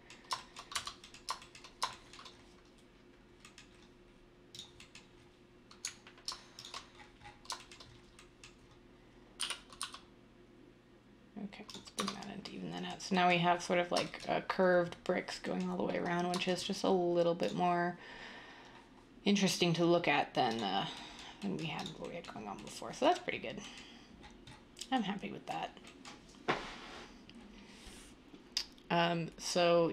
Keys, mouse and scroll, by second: 0.7 Tab, 9.7 typing, 11.9 Tab.